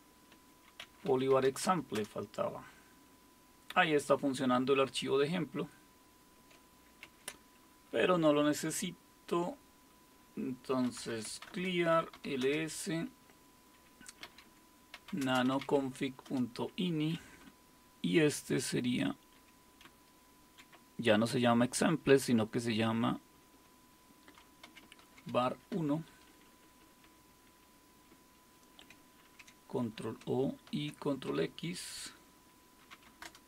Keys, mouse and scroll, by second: 0.0-2.0 typing, 7.0 ctrl+c, 10.6-12.6 typing, 14.0-16.1 typing, 16.3 Return, 17.5-20.7 Down, 18.1 typing, 20.5-22.1 typing, 22.3 Right, 23.0-24.7 Right, 24.4-25.7 typing, 26.1 Delete, 26.3 Delete, 26.5 Delete, 26.6 Delete, 26.8 Delete, 27.0 Delete, 28.1 Right, 29.3 ctrl+o, 29.8 Return, 30.7 ctrl+x, 32.7-33.4 typing.